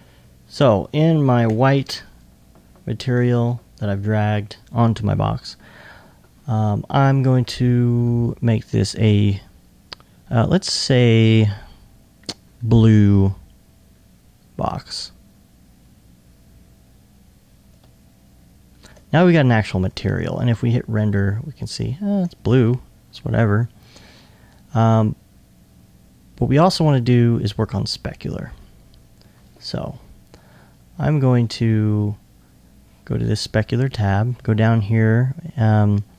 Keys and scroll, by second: 22.2 super+r.